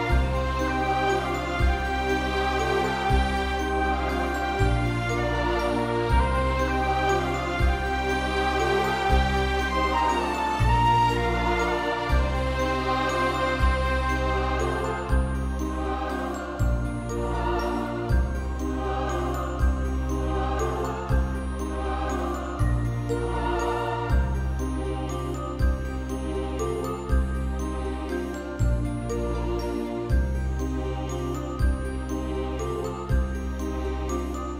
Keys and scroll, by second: 4.6 ctrl+v, 5.9 ctrl+BackSpace, 16.5 ctrl+v, 17.9 ctrl+BackSpace, 19.0 ctrl+=, 19.3 space, 32.4 ctrl+BackSpace, 33.6 ctrl+=, 33.8 space.